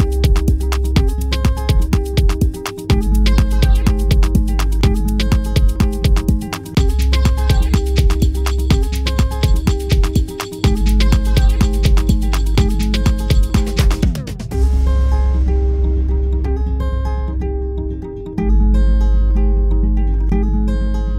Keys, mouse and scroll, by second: 0.3 click, 0.6 click, 1.0 click, 1.5 click, 1.7 click, 1.8 click, 2.2 shift+middle click, 2.4 ctrl+right click, 2.9 ctrl+right click, 3.3 ctrl+right click, 3.5 click, 4.8 middle click, 4.9 scroll down 3, 5.0 middle click, 5.0 shift+middle click, 5.3 ctrl+right click.